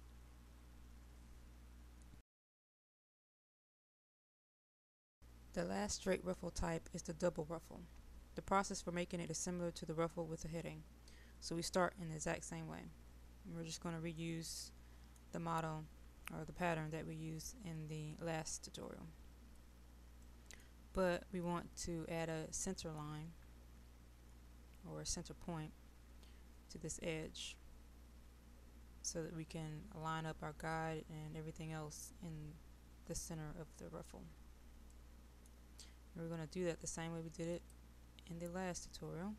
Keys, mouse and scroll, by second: 4.2 click, 13.6-14.2 scroll up 1, 14.2-20.9 middle drag, 20.9-22.3 scroll down 1, 22.3-23.5 middle drag, 23.5-34.9 scroll down 1, 34.9 middle click, 37.5 click.